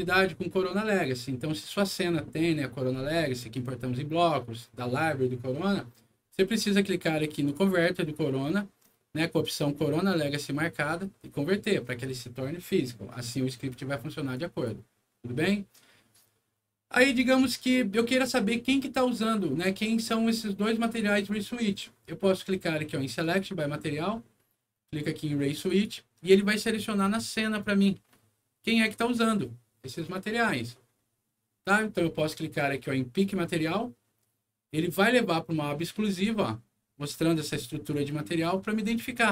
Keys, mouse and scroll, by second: 7.4 click, 14.3 click, 23.1 click, 25.6 click, 26.9 scroll down 1, 27.7 scroll down 1, 28.9 scroll down 1, 30.7 middle click, 33.1 click, 36.9-37.6 scroll up 2, 37.8 middle click, 38.8 scroll down 1.